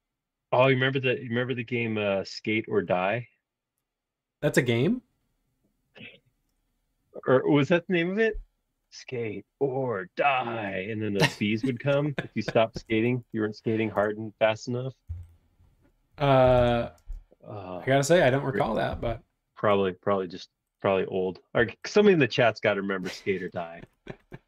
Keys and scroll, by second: 12.5-13.8 typing, 13.9 Return, 15.1 p, 16.1-17.0 typing, 18.8 m, 19.7 space, 21.7 m, 22.6 space.